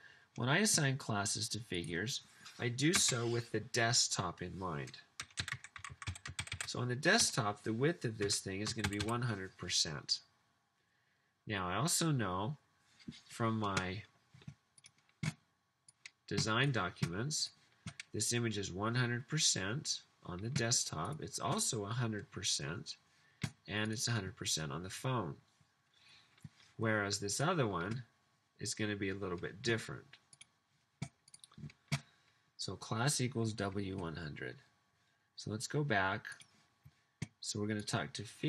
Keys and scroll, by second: 3.0 space, 5.3-8.9 typing.